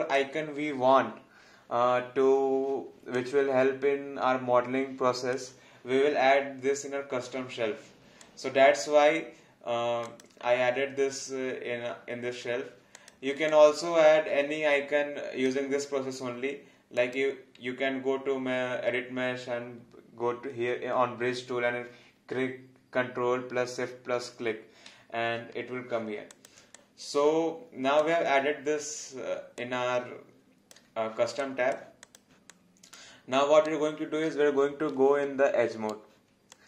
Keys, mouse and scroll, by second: 3.1 click, 8.2 click, 12.9 click, 26.3 click, 26.8 alt+click, 29.6 alt+click, 31.4 alt+click, 32.5 alt+click, 33.6 right click, 36.5 alt+click.